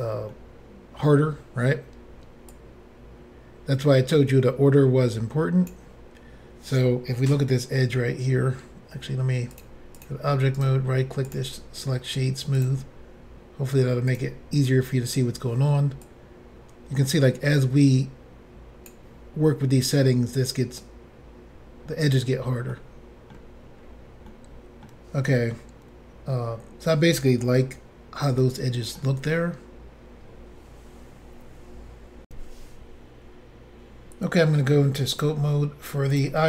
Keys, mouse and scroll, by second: 0.3 middle click, 6.2 scroll up 2, 7.4 shift+middle click, 8.2-9.0 scroll up 1, 9.6 click, 10.0 double click, 10.6 right click, 11.3 double click, 12.6 click, 16.0 click, 20.8 click, 22.7 middle click, 23.8-24.3 scroll down 1, 24.3 middle click, 28.4 shift+middle click, 32.3 Insert, 35.2 click, 35.2 click, 36.1 click, 36.2 click.